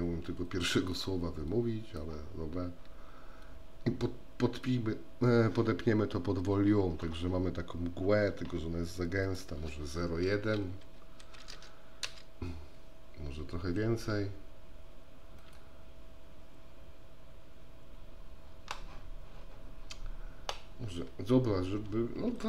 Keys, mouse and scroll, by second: 0.3 click, 1.7-5.0 drag, 9.4-14.0 drag, 15.5-22.4 drag.